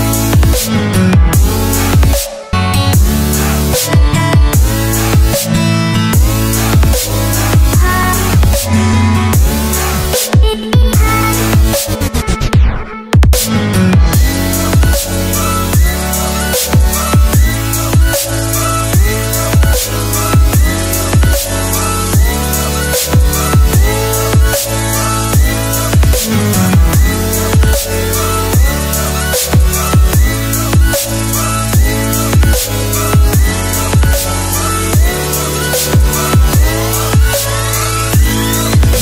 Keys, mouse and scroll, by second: 3.3 Return, 6.3 click, 10.2-10.7 scroll up 2, 12.2 click, 14.7 Delete, 15.6 click, 15.9 click, 19.1 Return, 19.5 click, 19.7 scroll down 1, 19.8 click, 21.0 click, 22.8 Return, 23.0 click, 23.6 Delete, 24.5 ctrl+Num_Lock, 24.8 click, 26.1 Return, 26.5 scroll down 1, 26.7 click, 28.4 ctrl+c, 28.8 v, 29.1 click, 31.0 click, 31.4 Return, 31.8 Right, 31.9 click, 32.9-33.7 alt+scroll up 2, 33.7 click, 33.9 Delete, 34.5 click, 36.0 Delete, 36.2 click, 36.6 click.